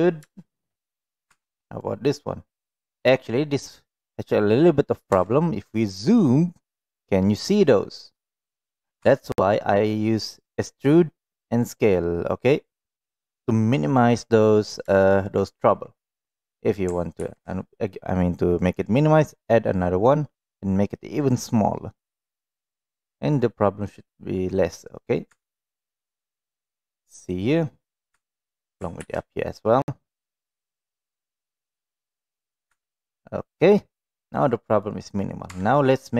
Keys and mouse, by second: 0.3 shift+middle drag, 1.3 Tab, 1.8 middle click, 5.2 Tab, 9.0 Tab, 12.3-13.9 middle drag, 17.1 ctrl+r, 25.3 Tab, 26.1-27.3 middle drag, 28.1 Tab, 29.0 ctrl+r, 32.8 Tab, 34.1-34.8 middle drag, 35.5 Tab, 35.9 middle click.